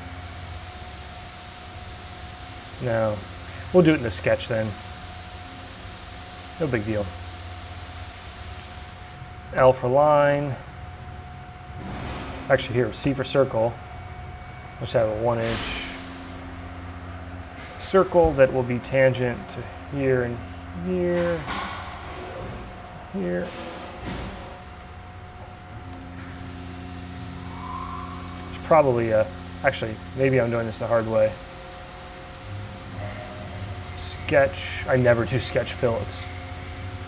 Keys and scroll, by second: 2.9 ctrl+z, 9.1 l, 13.0 c, 14.9 Return, 24.0 d, 24.8 c, 28.6 ctrl+z.